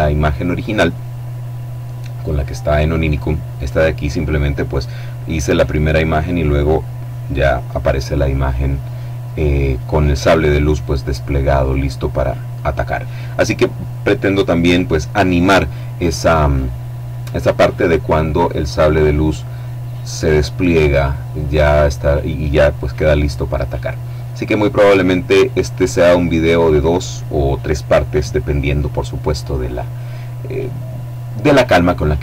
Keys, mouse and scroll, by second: 2.8 click, 11.9 click.